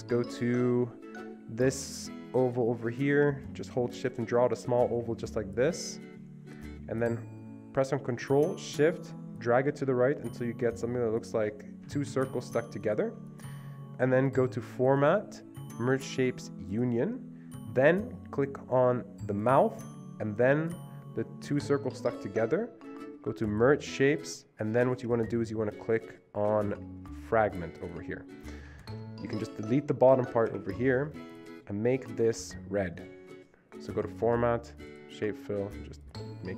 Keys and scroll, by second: 11.9 Escape, 12.2 Escape, 12.3 Escape, 28.7 Escape, 29.0 Escape, 30.6 Delete.